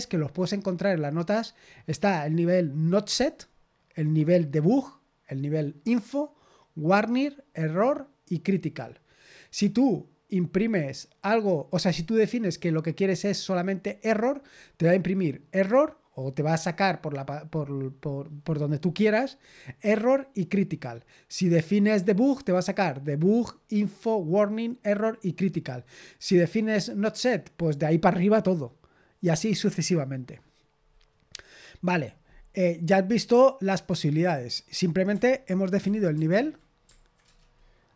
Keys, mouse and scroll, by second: 33.0-35.1 scroll down 1, 35.1-35.8 scroll down 1, 35.8 ctrl+p, 36.1 ctrl+p, 37.2 Return.